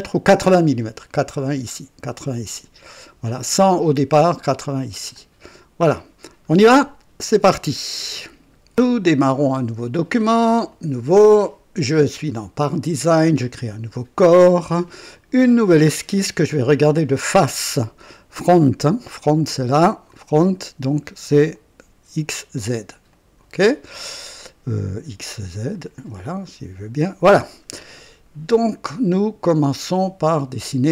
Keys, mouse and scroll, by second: 5.1-6.1 drag, 7.7 right click, 10.7 click, 13.4 click, 15.1 click, 18.0 click, 19.0 click, 20.1 click, 21.5 click, 23.0 click, 25.7 click, 26.4 click, 30.6 click.